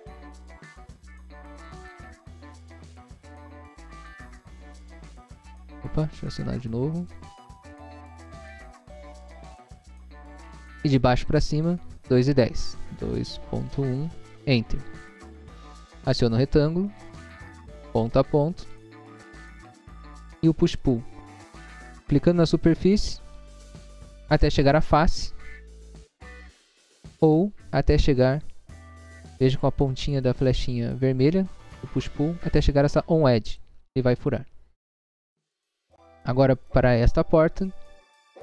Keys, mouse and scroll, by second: 1.0 p, 2.7 o, 3.3 ., 4.2 9, 4.7 Return, 5.6 scroll up 1, 7.1 click, 8.0-9.2 typing, 9.5 Return, 11.3 click, 12.9 2, 13.4 ., 13.9 1, 14.4 Return, 16.4 click, 17.9 click, 19.2 click, 20.8 click, 22.6 click, 27.2 scroll down 1, 28.0 scroll down 1, 28.9 scroll up 1, 33.4 click, 34.4-35.1 scroll down 2, 36.0 middle click, 37.0 scroll down 1, 37.4 middle click, 37.9 scroll up 1.